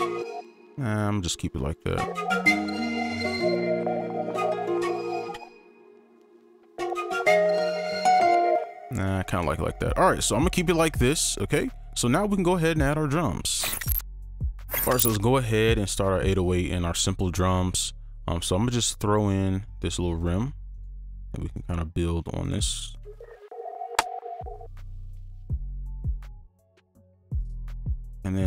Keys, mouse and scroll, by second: 0.4 space, 0.5-1.8 shift+scroll down 3, 1.8 space, 5.3 space, 6.2 ctrl+a, 6.6 ctrl+space, 9.0 right click, 10.4 double click, 20.7 right click, 23.0 space, 24.5 space, 24.8 right click, 26.1-28.1 alt+scroll up 1, 28.1 double click.